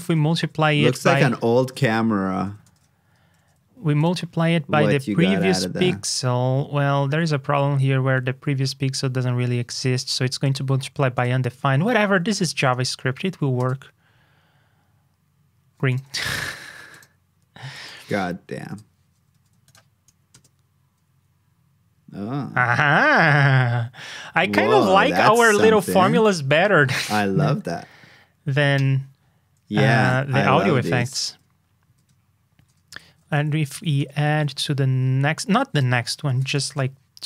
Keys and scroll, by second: 2.6 alt+shift+f, 3.3 super+s, 19.3 super+s.